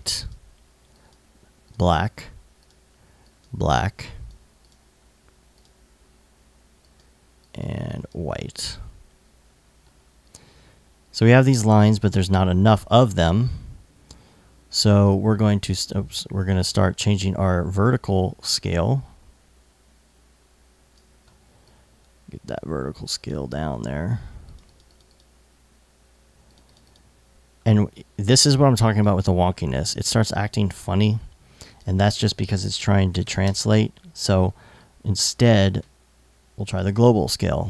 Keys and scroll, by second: 32.2-33.2 typing.